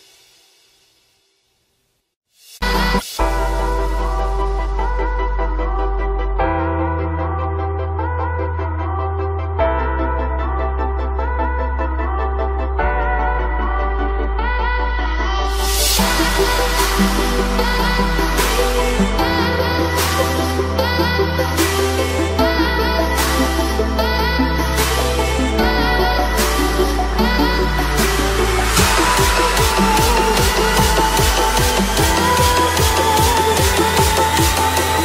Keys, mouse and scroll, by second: 0.0-1.5 typing, 0.4 alt+click, 1.3-5.3 drag, 5.3 click, 6.8 click, 7.5 ], 7.6-13.8 drag, 14.0-15.5 drag, 15.7 click, 16.1 space, 16.2 alt+click, 17.1 right click, 17.2 click, 18.5 ctrl+z, 19.0 click, 20.0 click, 24.1-27.9 drag, 34.1 click.